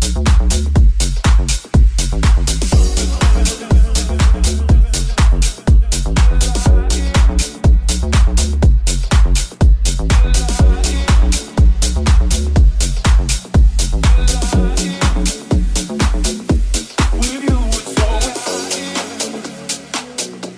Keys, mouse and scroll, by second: 0.7 Tab, 2.3 right click, 3.3 shift+s, 3.6 shift+s, 4.5 middle click, 4.5 right click, 4.8 middle click, 4.8 right click, 5.4 click, 5.4 click, 5.7 click, 7.6 right click, 7.8 click, 8.6-16.8 drag, 16.8-18.5 ctrl+drag, 18.6-20.5 drag.